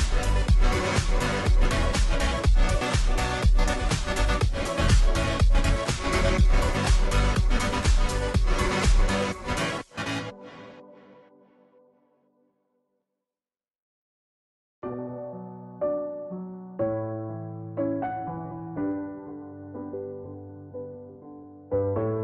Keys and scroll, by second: 0.0-22.2 typing.